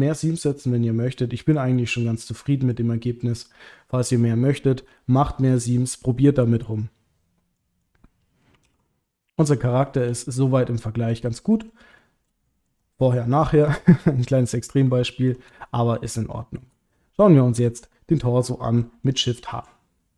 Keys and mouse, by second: 0.0 middle click, 0.7 middle click, 1.7 middle click, 3.3 middle click, 7.6 middle click, 8.6 alt+h, 9.7 shift+middle click, 10.3 click, 10.8 middle click, 11.5 middle click, 12.0 shift+middle click, 12.5 ctrl+middle click, 13.8 shift+middle click, 15.0 ctrl+middle click, 15.6 shift+middle click, 16.4 shift+middle click, 16.5 shift+click, 16.9 click, 17.6 l, 19.4 shift+h.